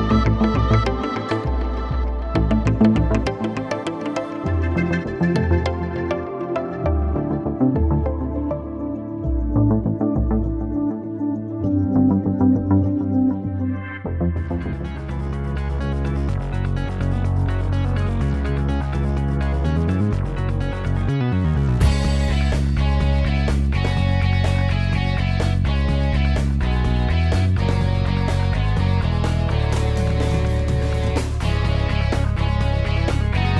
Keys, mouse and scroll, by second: 17.5 t, 21.9 alt+click, 23.6-26.9 typing, 28.2 space, 29.4-30.7 typing, 33.1-33.5 typing.